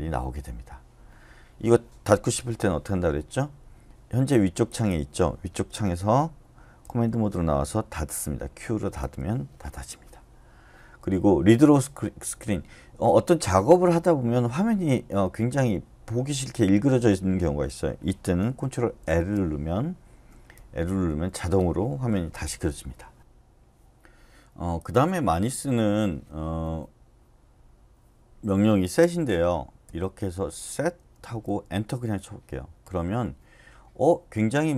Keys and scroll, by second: 6.8-8.4 typing, 9.0 Return, 19.0 ctrl+l, 21.1 Up, 29.8-31.5 typing, 31.9 Return.